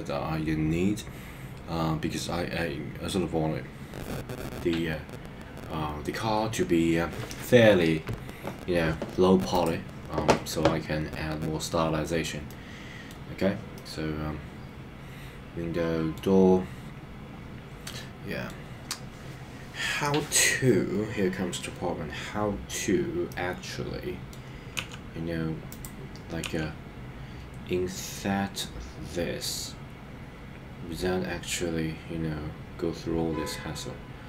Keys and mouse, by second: 12.4 middle click, 13.7-16.2 middle drag, 17.8 middle click, 23.3-24.3 middle drag, 25.8 click.